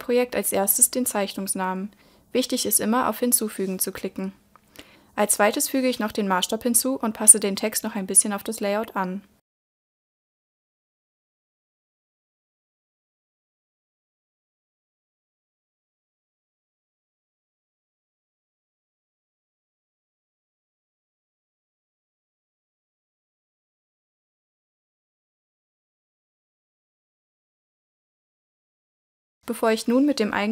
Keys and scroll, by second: 22.7 super+e.